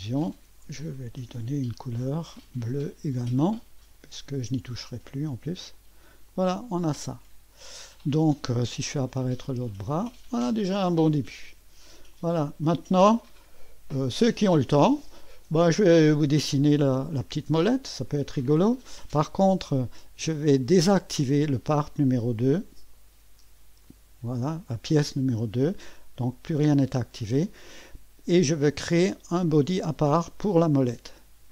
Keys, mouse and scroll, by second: 0.3 click, 1.1 ctrl+d, 2.3 click, 3.9-5.4 drag, 5.8 click, 6.9-8.3 drag, 9.0 click, 9.5 space, 10.4-12.0 drag, 12.1 click, 12.7-16.0 drag, 16.3 click, 17.6 click, 22.9 right click, 23.9 click, 24.6 click, 30.7 click.